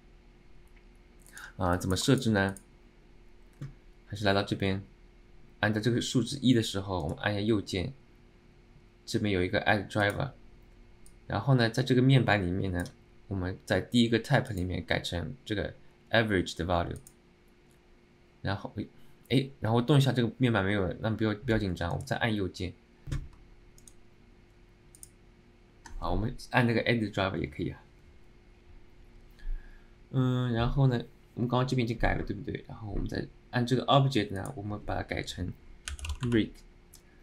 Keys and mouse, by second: 1.8 alt+middle click, 2.2 alt+shift+middle click, 33.1-37.2 right drag.